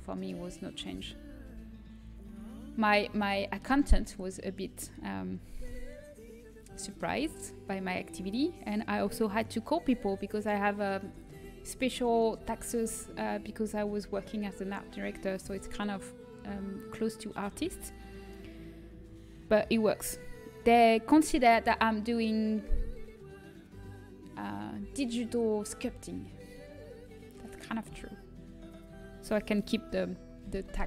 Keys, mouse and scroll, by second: 0.2 l, 0.7 l, 1.0 l, 2.7 l, 5.6 KP_3, 27.8 z, 30.3-30.8 middle drag.